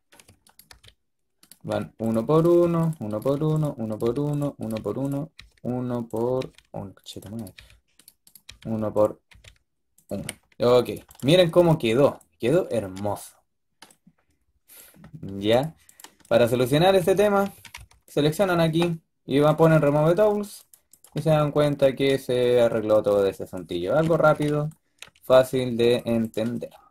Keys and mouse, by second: 1.5-9.1 drag, 1.6-5.2 typing, 6.3 g, 7.4 g, 8.3 g, 9.1 g, 10.0 a, 11.2-11.9 drag, 11.9-12.7 middle drag, 15.8-17.1 drag, 16.8-17.6 typing, 19.3-20.4 drag, 20.9 click, 21.1-22.3 middle drag, 26.2 click, 26.7 middle click, 26.8-26.9 drag.